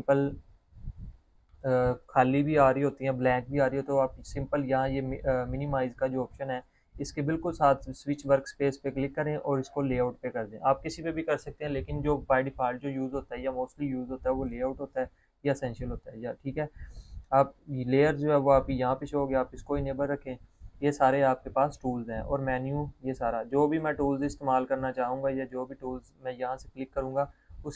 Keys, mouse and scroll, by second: 2.6 click, 9.3 click, 15.4 click, 18.8 click, 24.7 click, 24.8 click.